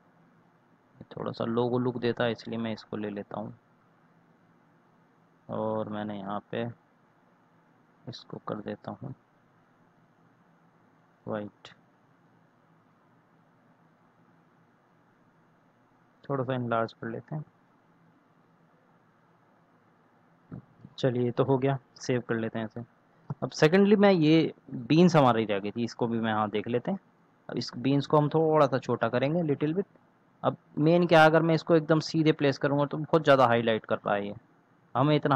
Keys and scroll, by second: 22.0 ctrl+s.